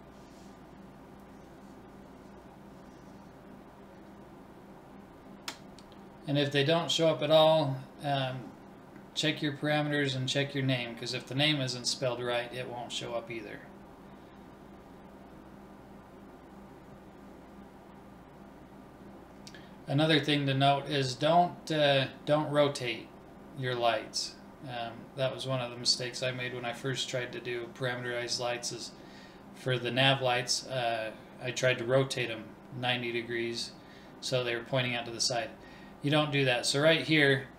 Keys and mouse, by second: 0.4-2.1 drag, 3.7 click, 5.2 BackSpace, 30.9-32.8 drag.